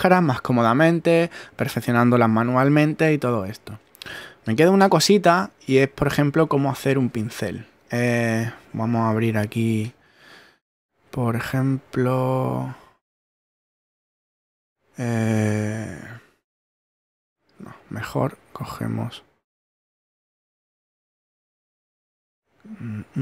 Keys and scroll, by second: 9.9 super+Tab.